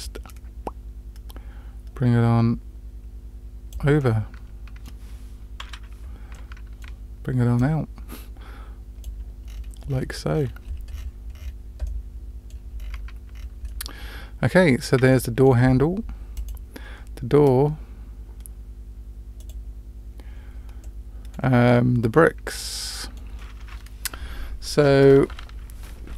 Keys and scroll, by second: 5.6 KP_Decimal.